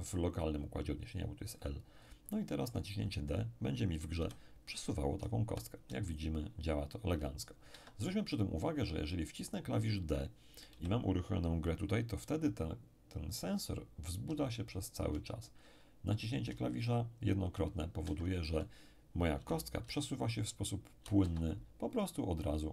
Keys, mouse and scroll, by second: 2.0-2.3 scroll up 1, 2.3-3.6 drag, 4.2 p, 5.2 d, 5.4 d, 7.7 Escape, 8.7-9.9 scroll up 1, 10.7 p, 14.2 d, 14.5 d, 16.4 d, 18.0 Escape, 19.4 p, 19.8 d, 20.9 d, 21.2 Escape, 21.8-22.3 scroll down 1, 22.3-22.7 scroll down 1.